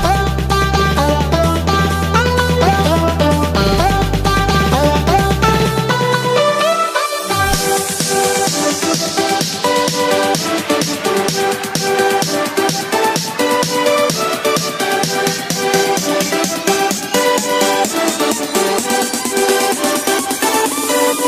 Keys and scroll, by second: 0.2 ctrl+-, 1.2 space, 1.6 ctrl+=, 5.5 ctrl+-, 6.3 space, 7.1 ctrl+-, 8.0 ctrl+-, 8.2 space, 8.4 ctrl+=, 13.9 space, 17.5 ctrl+-, 18.0 space, 18.4 ctrl+=, 20.2 space, 20.7 space, 21.1 ctrl+=.